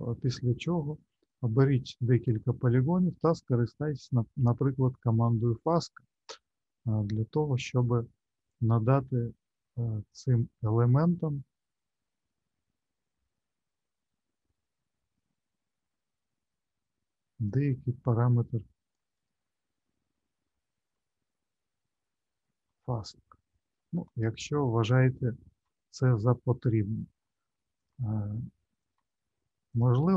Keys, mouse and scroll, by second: 0.5 click, 1.3 shift+click, 5.6 click, 7.0 scroll down 2, 8.4 click, 19.1 click, 20.4 shift+middle click, 21.2 middle click, 22.9 ctrl+z, 23.7 ctrl+z, 27.8 click, 28.8 click, 29.7 shift+click, 30.1 shift+click.